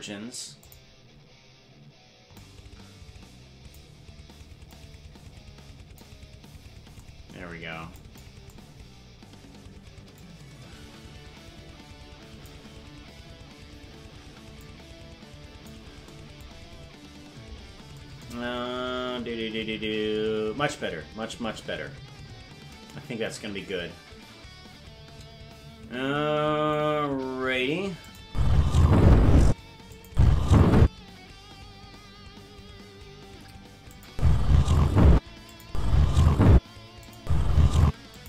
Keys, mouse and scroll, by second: 2.3-3.8 drag, 4.6-6.0 drag, 10.1-12.5 drag, 14.5-15.7 drag, 16.5 scroll down 5, 18.6 KP_0, 28.1 click, 28.2 space, 29.5 space, 29.9-30.9 drag, 30.1 space, 30.8 space, 33.9-35.2 drag, 34.1 space, 35.1-38.2 typing, 35.5-36.7 drag, 37.0 click, 38.1 click.